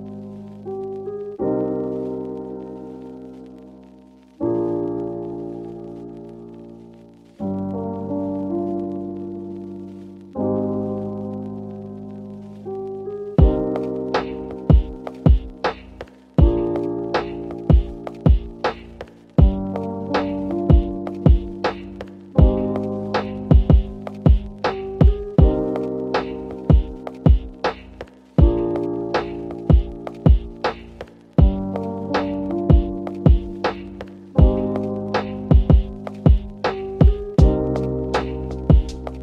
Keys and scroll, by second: 0.1 Return, 16.4-18.7 typing.